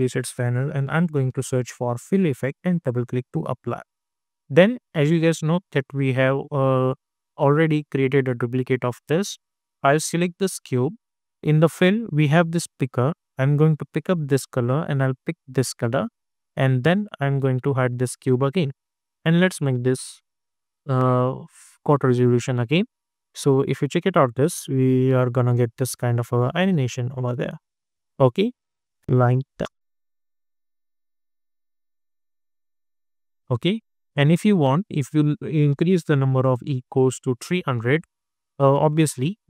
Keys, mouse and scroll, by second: 0.0-1.6 typing, 2.4 click, 5.8 click, 10.2 click, 13.6 click, 18.0 click, 23.0 space, 25.5 space, 26.6-29.5 drag, 29.5 space, 32.5 space, 34.7 click, 36.8 Return, 38.0 click, 38.5 space.